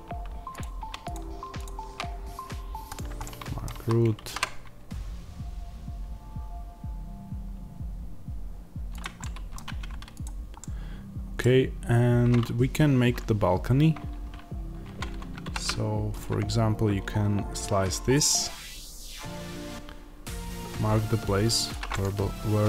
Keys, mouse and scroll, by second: 2.8 click, 3.1-8.9 middle drag, 3.7 a, 8.9 click, 9.1-10.1 middle drag, 9.6 Tab, 10.1 click, 10.5-21.6 middle drag, 14.7 Tab, 15.3 ctrl+r, 21.6 click, 21.8-22.6 middle drag.